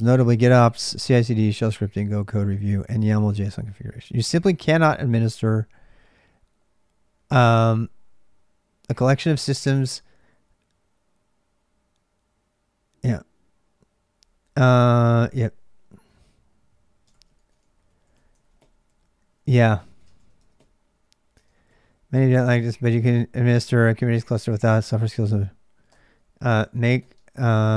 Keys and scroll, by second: 0.0-27.7 typing, 17.4 ctrl+[, 17.4 ctrl+j, 19.3 ctrl+[, 19.3 ctrl+j, 21.2 ctrl+[.